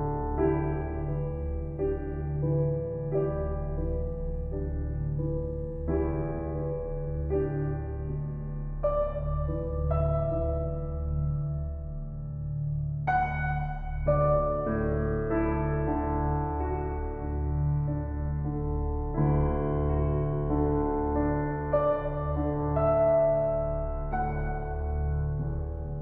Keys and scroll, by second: 1.1 Return, 13.3 ctrl+t.